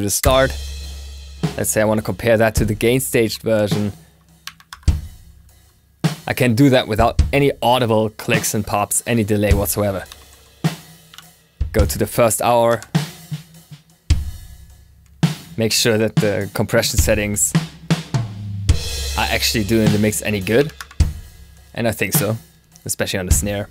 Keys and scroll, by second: 3.1 ctrl+super+s, 4.3 2, 4.6 Return.